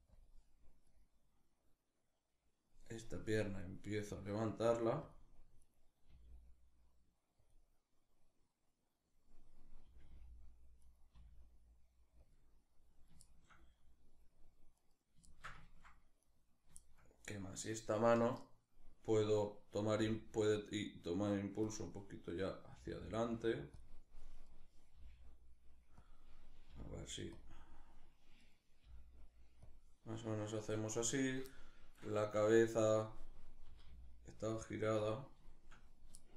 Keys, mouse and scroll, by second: 0.5-3.3 right drag, 3.7 r, 4.7 click, 5.3 right click, 5.7 r, 7.1 click, 9.5 r, 10.5 right click, 10.8 r, 11.9 click, 12.9-14.4 shift+middle drag, 14.4 right click, 14.9-15.9 ctrl+shift+middle drag, 15.9-16.4 right drag, 16.4-16.9 shift+middle drag, 16.9-19.6 right drag, 19.6 g, 21.3 click, 22.4 g, 23.4 click, 24.1 right click, 24.6 g, 25.7 click, 26.3 g, 27.0 click, 28.1 right click, 28.5 g, 29.3 click, 30.3-32.0 shift+middle drag, 32.0 right click, 33.3 r, 34.7 click, 35.1-36.3 shift+middle drag.